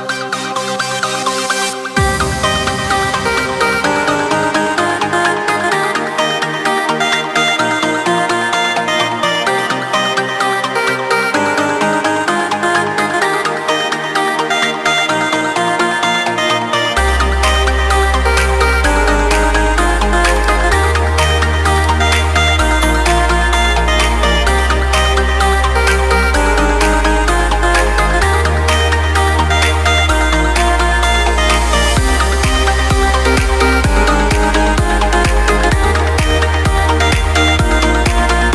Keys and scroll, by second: 3.9 ctrl+x, 4.5 ctrl+space, 5.4 ctrl+space, 6.3 ctrl+v, 8.4 ctrl+space, 24.6 ctrl+space.